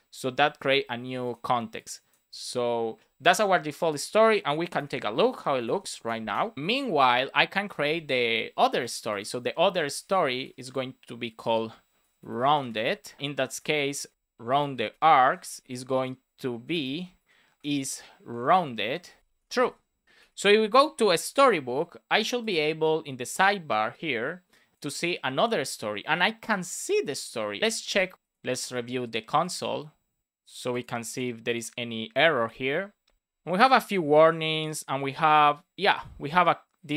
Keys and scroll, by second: 0.3 super+s, 5.2 space, 5.9 Return, 9.5 shift+super+Left, 9.7 super+c, 9.9 Right, 10.2 Return, 10.5 super+v, 11.9 shift+r, 13.2 Return, 13.5 shift+r, 15.2-16.8 typing, 17.1 Return, 17.6 Return, 18.7 shift+r, 19.3 space, 20.0 BackSpace, 20.1 super+s, 21.0 alt+shift+f, 21.3 super+s.